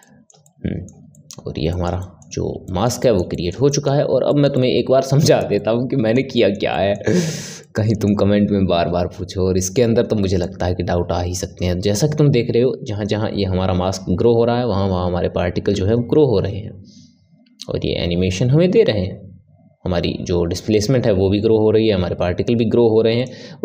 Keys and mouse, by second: 0.0-10.4 middle drag, 10.4-17.6 drag.